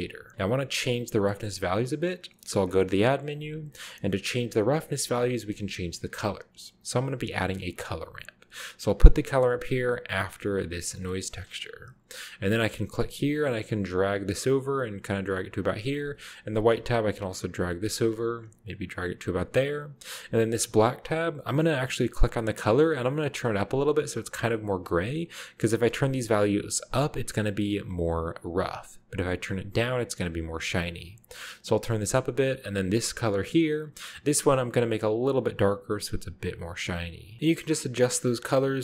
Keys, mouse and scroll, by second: 0.6-1.3 scroll up 1, 1.3 middle click, 1.3 scroll up 1, 2.6 shift+middle click, 2.7 shift+a, 3.6 click, 5.0-5.4 typing, 8.9 click, 10.1 click, 10.7 click, 11.1-11.7 middle drag, 11.9-12.9 scroll up 1, 12.9-15.0 drag, 16.5-19.5 drag, 21.1 click, 22.2 click, 23.3-32.0 drag, 33.1 click, 34.1 click, 35.0-36.5 drag, 37.4 a, 37.4-38.2 scroll up 1, 37.7-38.8 middle drag, 38.4-38.8 scroll up 1.